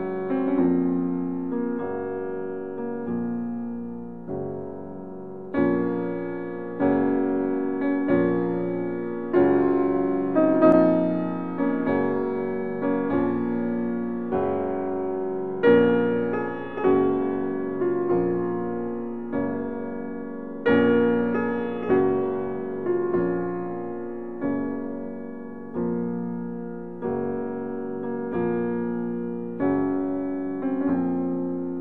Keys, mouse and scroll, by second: 0.5 click, 0.6 right click, 5.8 s, 6.9 x.